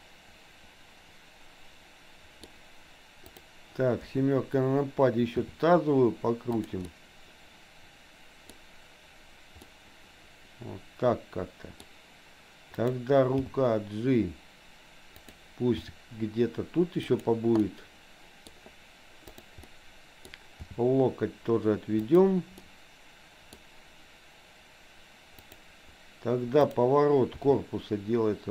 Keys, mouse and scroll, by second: 3.2 click, 4.1 KP_7, 5.3 r, 6.9-8.6 middle drag, 9.7-11.9 middle drag, 12.8 click, 13.4 g, 15.9 r, 17.7 middle click, 19.3 click, 19.7 middle click, 20.7 g, 22.7 middle click, 25.4 click, 26.7 click, 27.4 r.